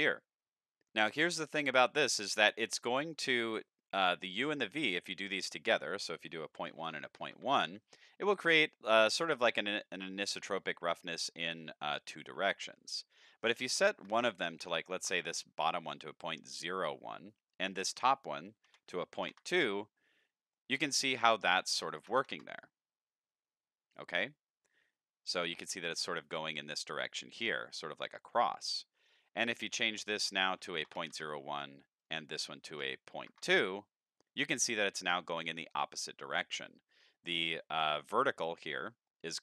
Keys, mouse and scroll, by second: 2.7 middle click, 5.4 click, 8.7-9.1 middle drag, 10.7 middle click, 13.1 click, 14.0 click, 17.2 click, 20.5 middle click, 21.5 click, 26.8-27.5 middle drag, 28.2 middle click, 29.7 click, 32.0 click, 32.7 click, 34.4 middle click, 39.1 middle click, 39.3-39.4 middle drag.